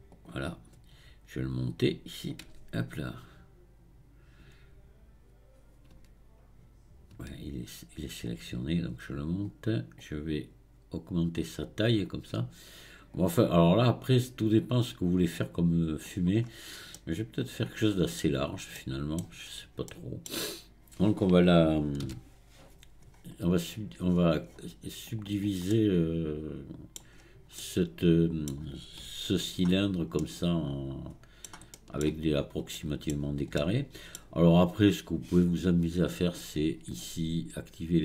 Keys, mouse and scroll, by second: 8.3-16.2 drag, 16.5-17.0 scroll up 4, 17.0-18.3 middle drag, 18.3-18.8 scroll down 4, 18.8 middle click, 19.5-19.9 scroll up 1, 19.9-27.2 middle drag, 27.2-27.6 scroll up 1, 27.6-29.1 middle drag, 29.1-30.2 scroll up 1, 30.2-33.2 middle drag, 33.2-33.6 scroll down 2, 33.6 shift+middle click, 34.6-36.3 scroll up 2, 36.3-37.7 scroll up 1.